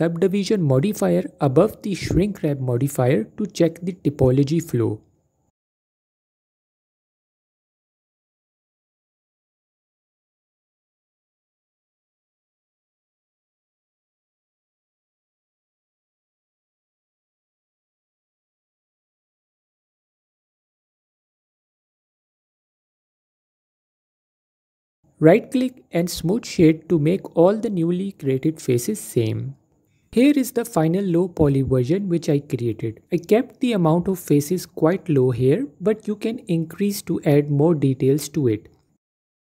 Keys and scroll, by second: 16.4 Tab, 23.9-24.8 typing, 25.9-26.8 typing, 27.1 Tab, 30.0 alt+Tab, 31.2 F4, 37.8 F4, 38.3 F4, 39.1 typing.